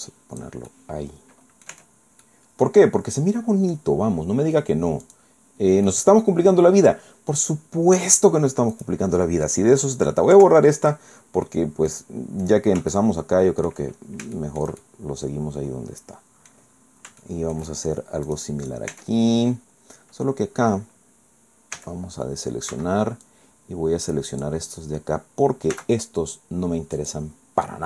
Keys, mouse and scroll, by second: 0.7-1.8 middle drag, 1.7 Tab, 2.2-3.9 middle drag, 5.0 click, 5.9-7.0 middle drag, 7.6-8.0 scroll up 1, 8.8 right click, 10.4 Delete, 10.8 click, 11.4 click, 11.6 scroll down 1, 12.4 right click, 12.9 shift+click, 14.0 shift+scroll down 2, 14.4 shift+click, 15.2-16.7 drag, 16.8 scroll up 2, 17.2 shift+click, 17.8 shift+middle click, 18.3 click, 18.6 click, 19.1 Tab, 21.8 a, 22.7 b, 23.2-24.6 drag, 25.8 x, 27.0 click.